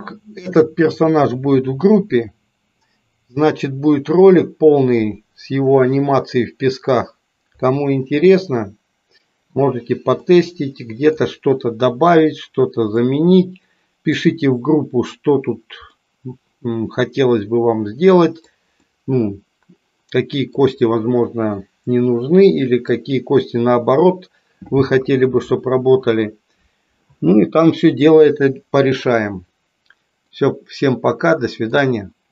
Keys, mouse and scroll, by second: 10.2-11.3 middle drag, 13.2-14.3 middle drag, 15.9-18.5 middle drag, 18.9-20.6 middle drag, 30.4-31.7 middle drag.